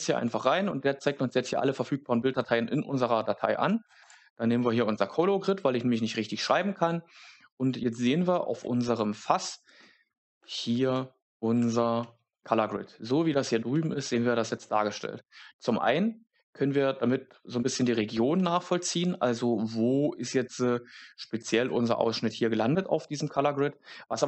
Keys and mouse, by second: 11.5 Tab.